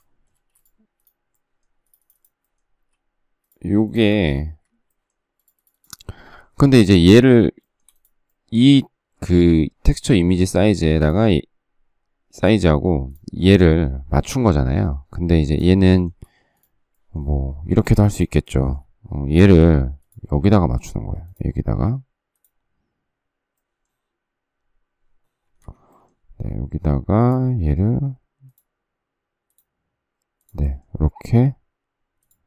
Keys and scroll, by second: 1.4 space, 2.7 s, 4.0 space, 4.0 Escape, 4.5 Escape, 19.4 s, 25.6 Escape.